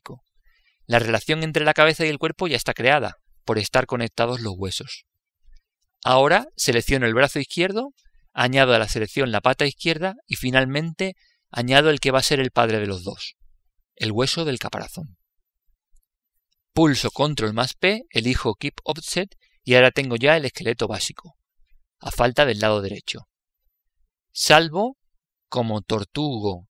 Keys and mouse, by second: 8.9-12.3 right drag, 15.2 right click, 19.1 ctrl+p, 26.0 click.